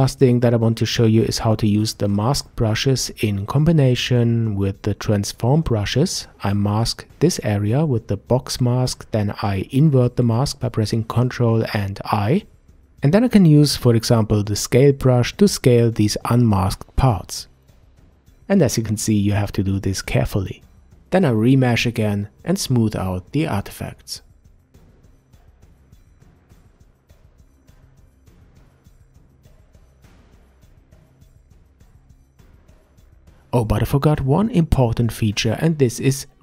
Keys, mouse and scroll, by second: 1.3 ctrl+z, 3.5 click, 4.3-6.1 middle drag, 6.1 click, 8.1-10.4 middle drag, 10.4 ctrl+i, 12.8 click, 14.1-17.0 drag, 20.6-21.8 middle drag, 22.7 alt+m, 23.4-25.4 drag, 25.9 click, 26.8 f, 27.0 shift+click, 27.8 click, 28.2-29.2 shift+drag, 29.3 middle click, 29.6-30.8 shift+drag, 31.1-32.1 drag, 32.2-33.0 middle drag, 35.0-36.4 middle drag.